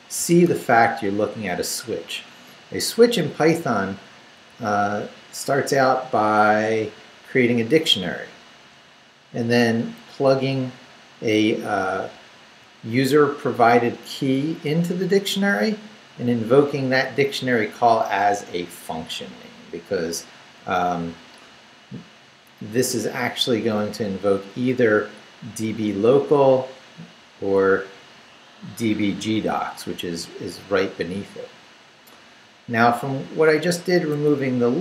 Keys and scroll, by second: 0.2 x, 1.0 Up, 3.5 Right, 6.2 Right, 10.0 Left, 13.6 Down, 14.1 Right, 14.7 Left, 15.5 Right, 16.7 Left, 17.9 Right, 18.4 Left, 20.3 Left, 22.2 Right, 23.8 Down, 29.7 Up, 34.2 Down.